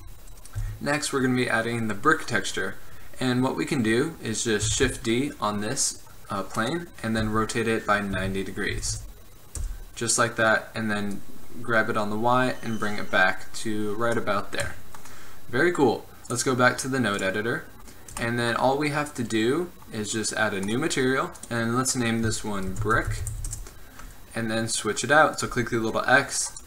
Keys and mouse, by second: 0.7 Tab, 4.9 shift+d, 7.3 r, 11.2-13.0 drag, 14.8-23.4 drag, 25.6-26.4 drag.